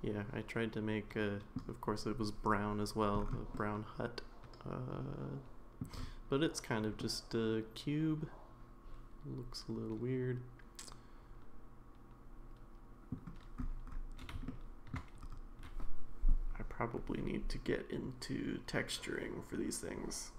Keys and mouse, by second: 3.5-5.8 middle drag, 7.0-13.1 middle drag, 14.5-15.0 shift+middle drag.